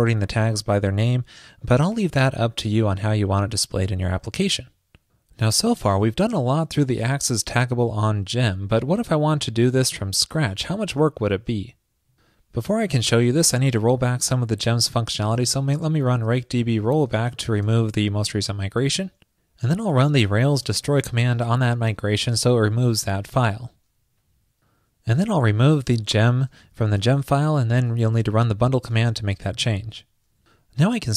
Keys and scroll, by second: 21.0 super+v, 27.1 super+/, 28.3 super+s.